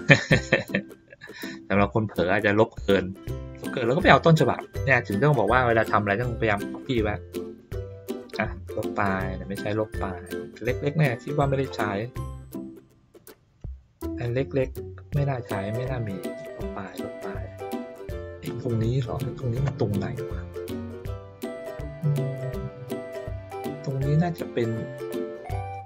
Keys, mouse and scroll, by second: 0.1 ctrl+middle click, 0.4 ctrl+middle click, 1.2 ctrl+middle click, 1.6 ctrl+middle click, 3.1-4.6 drag, 6.7 click, 8.1 middle click, 8.8 click, 10.1 click, 11.2 middle click, 12.2 click, 14.5 click, 15.8 click, 17.0 click, 18.5 click, 20.6 ctrl+middle click, 21.0-22.1 ctrl+middle drag.